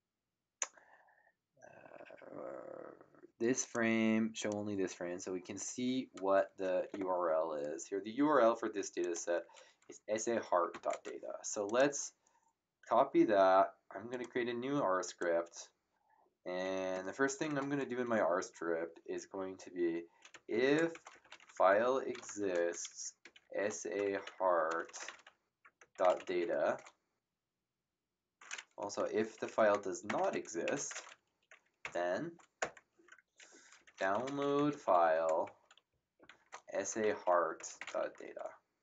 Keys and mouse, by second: 3.6 click, 9.0 click, 10.7 ctrl+c, 11.6 click, 14.1 click, 20.0-27.1 typing, 28.8 Home, 29.2 Right, 30.0 1, 30.6 End, 32.6 Return, 32.6 KP_Enter, 33.5-38.4 typing.